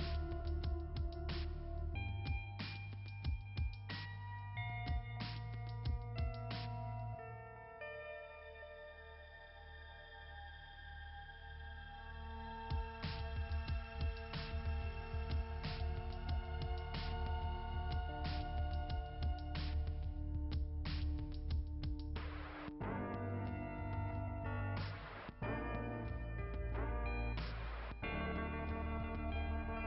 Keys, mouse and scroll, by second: 1.0 click, 2.3 click, 7.5 click, 14.7 click, 15.9 click, 16.0 click, 16.2 click, 18.1 click, 20.0 click, 20.3 click, 25.8 right click, 27.2 click, 27.9 click.